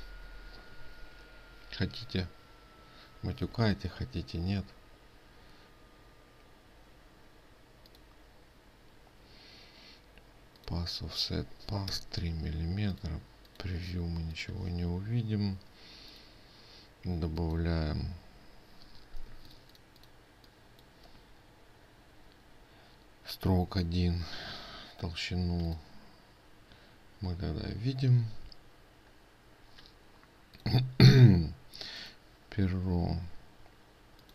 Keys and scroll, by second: 19.9 ctrl+space.